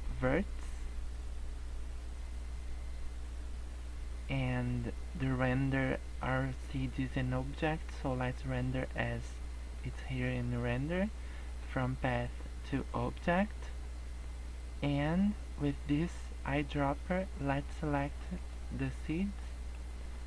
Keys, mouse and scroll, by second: 2.4 scroll down 2, 3.0 scroll down 2, 9.7 click, 10.2 click, 11.5 click, 13.7 scroll up 2, 16.9 click, 18.8 middle click, 19.3 scroll up 2, 19.7 middle click.